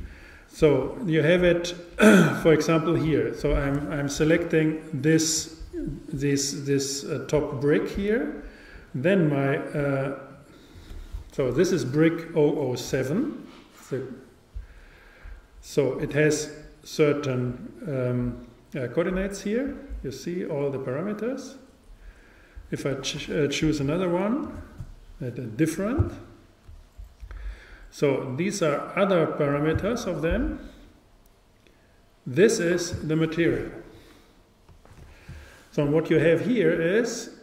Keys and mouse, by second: 5.0-7.0 super+right drag, 10.3-12.3 drag, 24.1-25.9 super+right drag, 34.0 click.